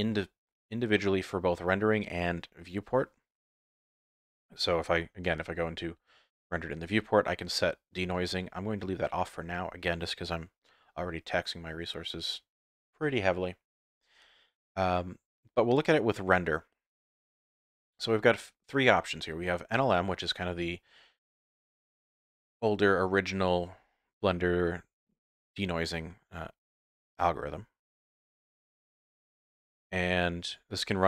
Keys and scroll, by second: 5.2 z, 8.1 z.